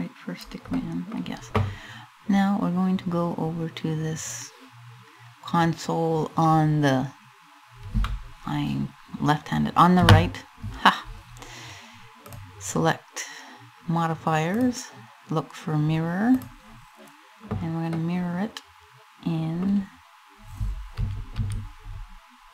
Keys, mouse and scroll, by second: 0.4 middle click, 16.0 click, 17.6 middle click, 20.6 a, 21.0 a, 22.2 click.